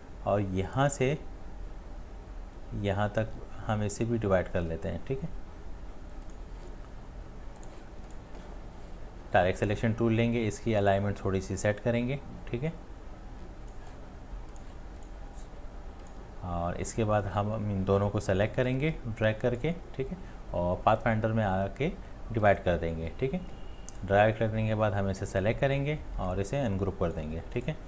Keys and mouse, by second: 26.2 right click.